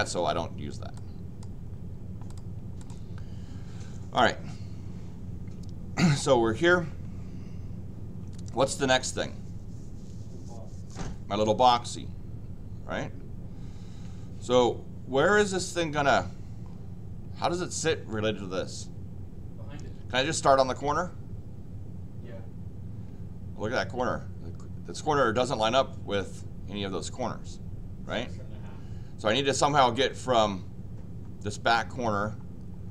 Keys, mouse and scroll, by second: 0.9 click, 2.2 click, 2.8 click.